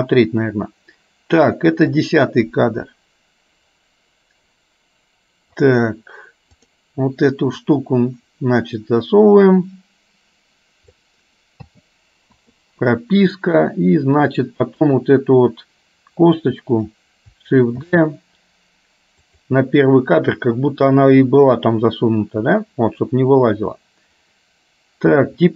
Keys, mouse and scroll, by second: 2.2-5.8 drag, 6.7 click, 7.7-11.2 drag, 11.8 a, 12.4 i, 14.9 click, 16.4 click, 18.1 shift+d, 22.6-25.5 drag.